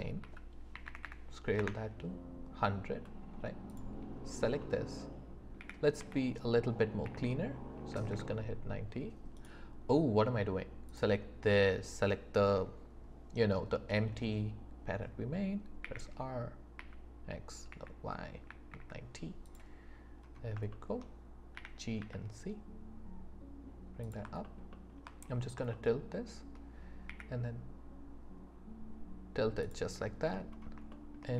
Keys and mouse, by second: 0.2 s, 0.7 KP_1, 0.9 KP_0, 1.6 Return, 5.6 r, 6.0 x, 7.9 KP_9, 8.1 KP_0, 15.8 r, 16.8 x, 18.5 KP_9, 21.5 g, 22.0 z, 24.7 alt+click, 25.7 shift+click, 27.1 r, 29.6 click, 30.9 shift+click, 31.1 shift+middle click.